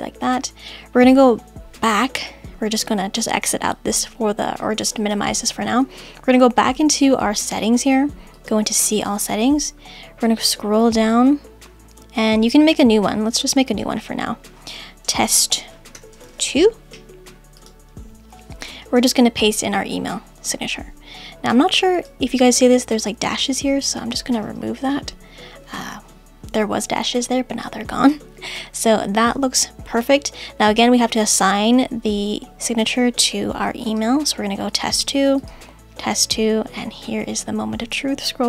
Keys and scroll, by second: 15.4 shift+t, 19.0 super+v.